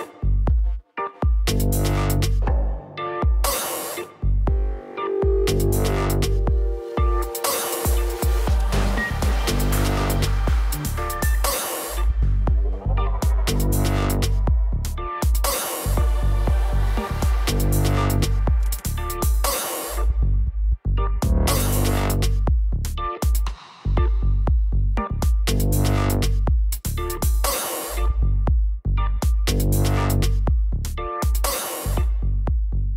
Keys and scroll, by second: 27.1 ctrl+s, 30.8 l, 32.7 space.